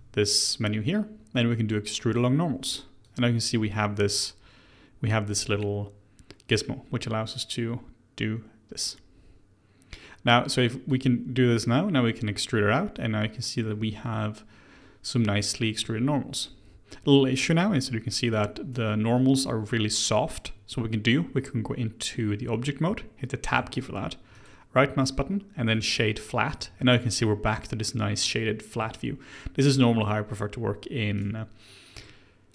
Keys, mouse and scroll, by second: 3.0 click, 10.8 click, 11.6-14.6 middle drag, 18.7-19.6 scroll up 1, 23.5 Tab, 24.3-26.8 right drag, 26.8-29.9 middle drag, 31.1-32.5 right drag.